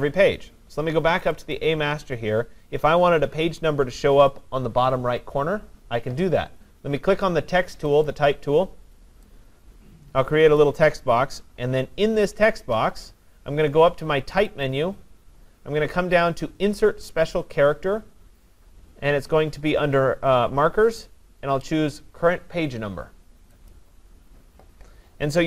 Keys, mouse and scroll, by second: 1.3 click, 1.6 click, 8.1 click, 10.6 click, 14.7 click, 23.7 click.